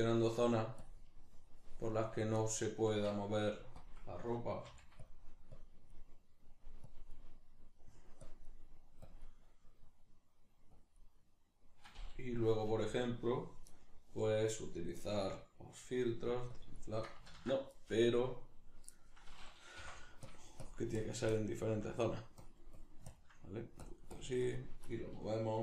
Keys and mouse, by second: 0.8-2.4 drag, 2.4-3.8 middle drag, 3.8 click, 4.2 middle click, 4.7 f, 5.1 click, 14.8-16.6 drag, 17.3 ctrl+z, 20.3-25.6 drag.